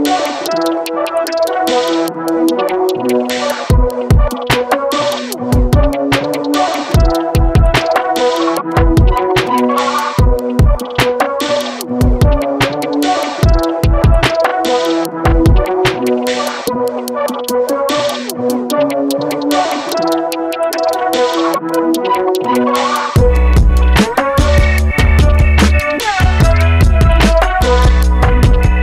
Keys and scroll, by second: 16.0 4, 16.1 5, 16.6 Return, 22.2 5, 22.5 Return, 23.9-24.3 typing, 26.7 typing, 28.2-28.8 typing.